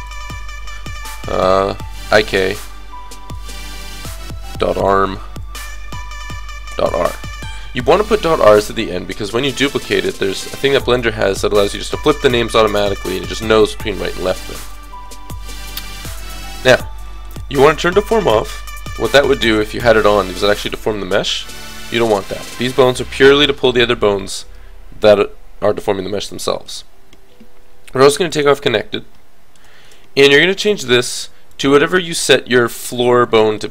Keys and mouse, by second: 0.1-1.7 middle drag, 1.7 click, 3.8 BackSpace, 8.6 middle click, 15.0 middle click, 15.0 KP_3, 16.0 click, 18.5 click, 18.6-22.0 middle drag, 28.3-30.3 middle drag, 30.7-32.6 middle drag.